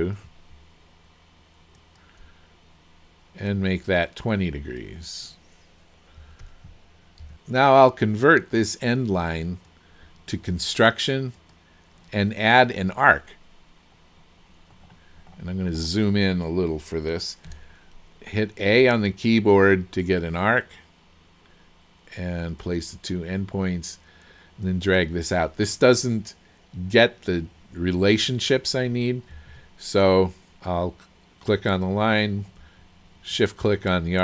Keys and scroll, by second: 6.2 KP_2, 6.5 KP_0, 7.3 Return, 17.5 a, 29.5 Escape.